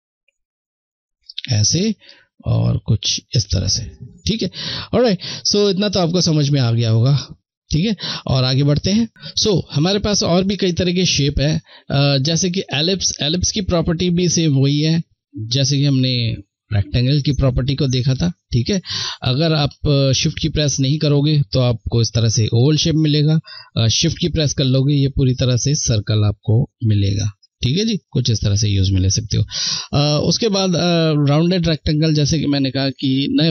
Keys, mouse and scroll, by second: 4.6 click, 9.8 click, 13.7-16.1 shift+drag, 18.9 ctrl+z, 20.1 click, 27.7 ctrl+z, 29.0 click, 29.1 click.